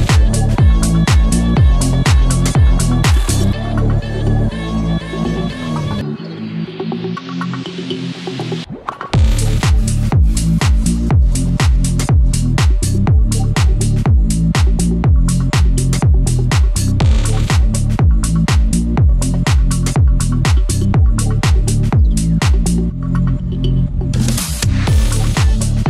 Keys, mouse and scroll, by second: 0.2 click, 0.4 `, 0.7 scroll down 1, 1.6 click, 3.0 scroll down 1, 3.2-3.6 scroll up 1, 3.6 scroll down 1, 3.8 scroll up 1, 4.3-7.3 drag, 8.7 click, 8.9 scroll up 1, 9.3 click, 10.1 scroll down 1, 10.8 scroll up 1, 11.2 scroll down 1, 12.3 scroll up 1, 12.9 click, 16.0 scroll down 1, 16.3 scroll up 1, 16.5 click, 17.0-17.9 scroll down 1, 17.9 click, 20.3-20.7 scroll down 1, 21.8 click, 23.1 ctrl+z, 23.6 click, 23.9 ctrl+z, 24.7 click, 25.0 ctrl+z, 25.6 scroll down 1.